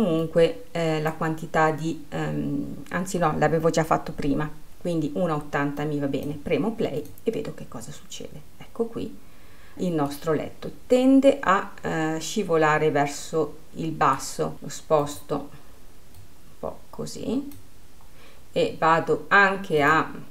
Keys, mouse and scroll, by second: 0.7-3.9 drag, 6.3-10.2 drag, 10.8-14.5 middle drag, 14.5-16.8 drag.